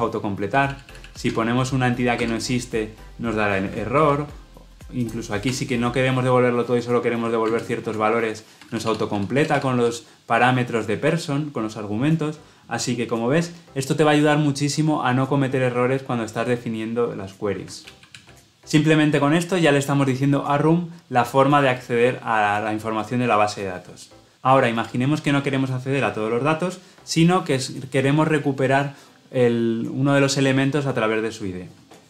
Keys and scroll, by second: 3.9 ctrl+z, 7.4 ctrl+space, 17.8 ctrl+z.